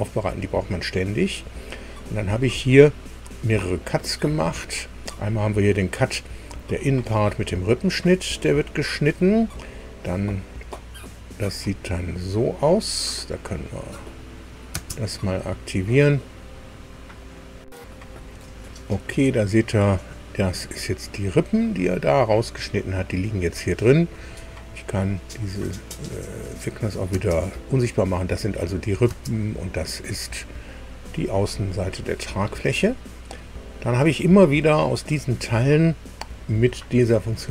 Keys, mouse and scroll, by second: 2.9 click, 9.0-9.5 scroll down 4, 14.0 click, 14.7 space, 17.1 click, 18.6 click, 21.3 scroll up 1, 21.9-23.3 middle drag, 23.3-23.7 scroll down 1, 23.7 middle click, 26.6 click, 29.0 space.